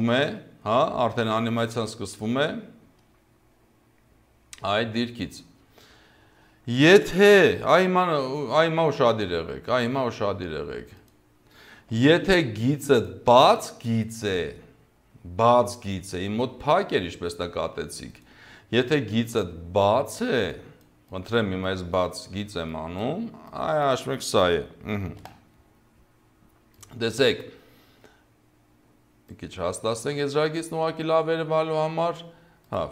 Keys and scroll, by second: 1.0 0, 4.7 0, 11.9 Delete, 13.3 Delete, 25.2 v.